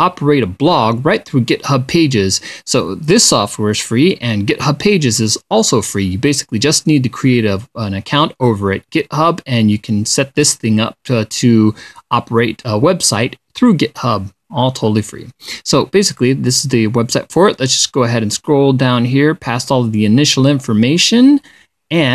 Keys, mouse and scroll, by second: 18.0-20.6 drag, 21.9-22.1 drag.